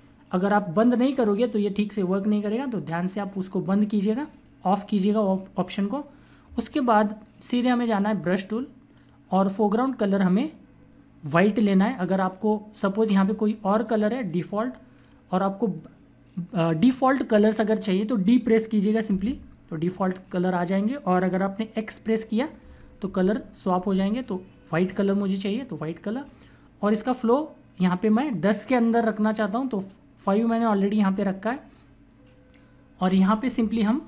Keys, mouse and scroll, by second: 7.8 click, 13.0 click, 19.0 d, 22.5-23.6 typing, 33.0-34.0 typing.